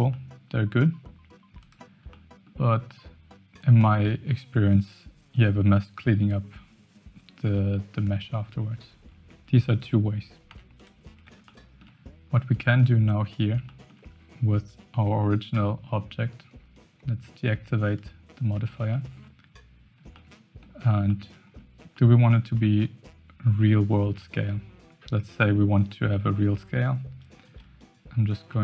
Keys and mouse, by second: 0.1 middle click, 1.6 click, 2.1 middle click, 9.1 Tab, 10.4 x, 11.4 shift+click, 12.5 click, 13.6 shift+drag, 17.8 click, 18.9 shift+middle drag, 20.1-20.6 shift+middle drag, 21.1-21.6 shift+middle drag, 22.0 middle click, 27.4 KP_1, 28.4 shift+a.